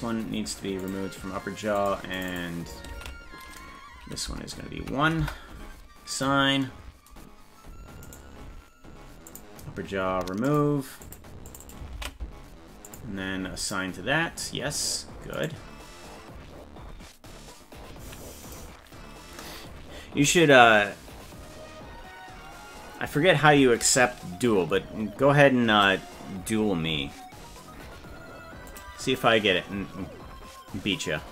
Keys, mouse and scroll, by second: 0.8 click, 1.8 click, 2.2 click, 2.3-5.6 drag, 6.1 click, 8.0 right click, 9.3 click, 10.5 click, 11.0 click, 11.5 click, 11.6-13.0 ctrl+drag, 13.6 click, 15.4 right click.